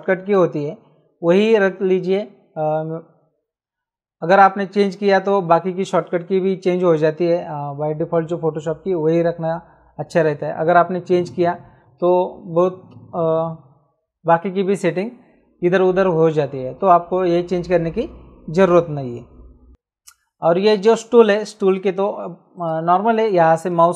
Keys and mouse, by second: 22.6 right click.